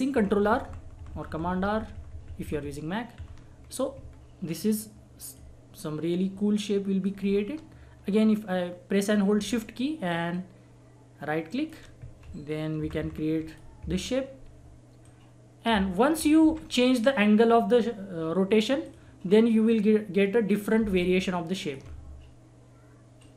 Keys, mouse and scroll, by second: 3.6 click, 4.1-4.4 scroll down 1, 4.7-7.3 drag, 7.3 scroll up 1, 8.2 scroll down 1, 9.1 scroll up 1, 10.3 shift+click, 11.5 shift+right click, 12.8 ctrl+r, 13.5 click, 13.9 scroll down 1, 15.0-16.4 drag, 16.4 Delete, 17.7 scroll up 1, 18.8-23.2 drag, 23.2-23.3 drag.